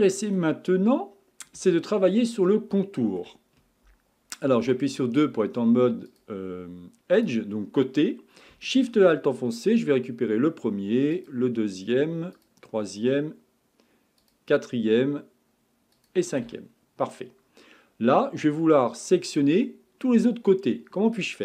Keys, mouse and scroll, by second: 0.8-1.7 scroll up 2, 1.7-2.4 shift+middle drag, 2.4 scroll down 2, 2.8-4.6 shift+middle drag, 4.6 2, 6.1 click, 7.2 click, 9.6 alt+shift+click, 11.1 alt+shift+click, 12.3 alt+shift+click, 14.2 alt+shift+click, 15.9 alt+shift+click, 16.6-17.2 scroll down 3, 17.2-18.6 scroll up 3, 18.6-19.3 middle drag, 19.3-19.8 scroll down 4, 21.1-21.4 middle drag.